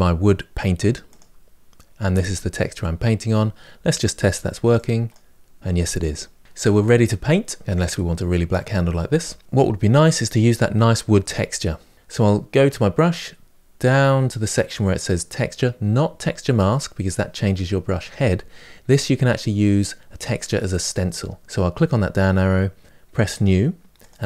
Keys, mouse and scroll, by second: 3.3-4.5 scroll up 7, 4.5-7.6 drag, 7.6-23.2 middle drag, 23.2-24.2 drag.